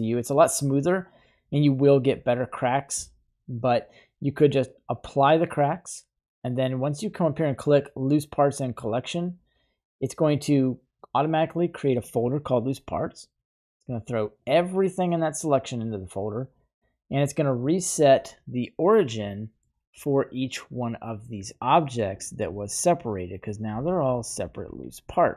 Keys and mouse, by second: 4.7 click, 8.7 typing, 17.7-18.6 middle drag, 19.3-19.6 middle drag, 19.9 right click, 21.7 middle drag, 22.1 right click, 22.3 g, 23.5 right click, 23.7 g, 24.4 right click, 24.8 g.